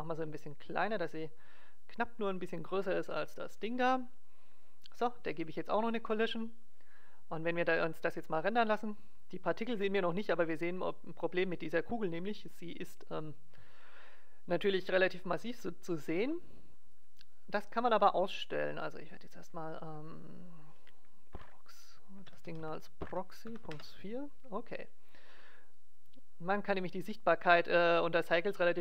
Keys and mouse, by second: 3.6-5.3 drag, 6.0-9.3 drag, 16.9-20.9 drag, 25.2-27.6 middle drag, 27.8-28.8 drag.